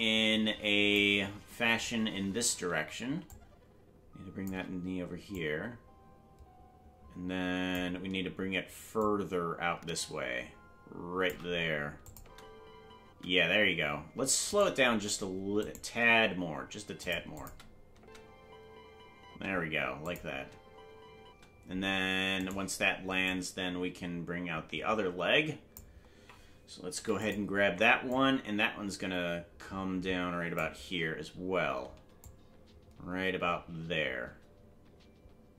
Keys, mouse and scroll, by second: 3.2-4.4 shift+drag, 5.3-7.7 drag, 8.9-11.3 shift+drag, 12.0 click, 12.1 space, 13.9 space, 14.5-15.8 right drag, 15.8 g, 17.3 click, 17.9 space, 20.0 click, 20.0 space, 20.2 space, 22.4 right click, 22.4 space, 23.2-25.7 drag, 27.3 i, 28.1-30.6 drag, 31.0-32.2 scroll down 1, 32.2-35.5 shift+drag, 32.2-33.0 scroll down 1.